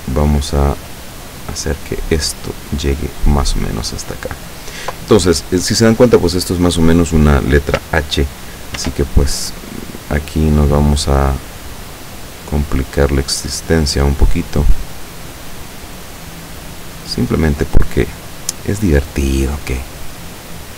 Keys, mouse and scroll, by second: 0.6 click, 2.5-4.7 drag, 8.8 ctrl+r, 11.8 click, 12.4-13.6 scroll up 2, 13.6 scroll down 2, 13.8-14.1 scroll up 2, 14.1 click, 15.4-16.8 drag, 17.7 right click, 18.6-19.8 drag.